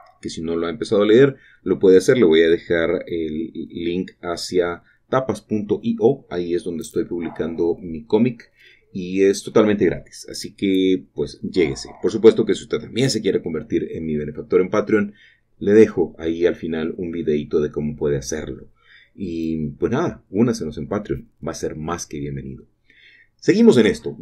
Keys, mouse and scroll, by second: 2.0 shift+middle click, 5.7-8.3 drag, 8.6 typing, 12.2-20.1 shift+drag, 12.2 typing, 20.1-22.5 scroll down 3, 20.1-21.4 typing, 22.5 typing, 23.2-24.2 shift+middle drag.